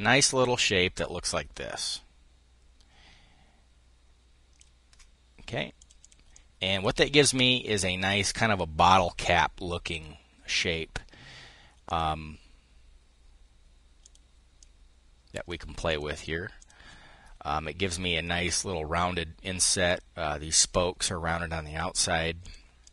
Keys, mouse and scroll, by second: 6.7 click, 11.5 click, 13.6-15.0 drag, 15.6 click, 16.2 click, 22.1 click.